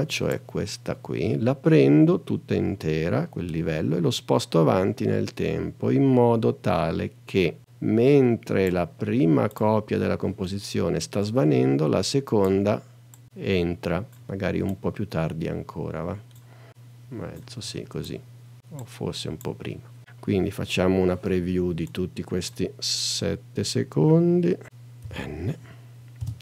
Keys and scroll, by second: 25.0 n, 26.2 space.